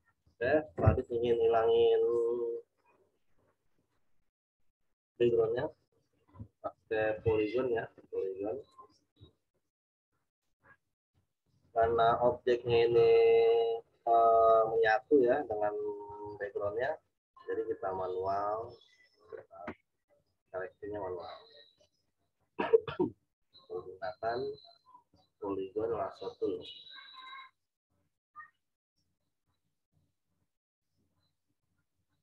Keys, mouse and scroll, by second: 4.8 click, 7.1 z, 7.4 click, 12.7 click, 17.3 click, 26.4 click.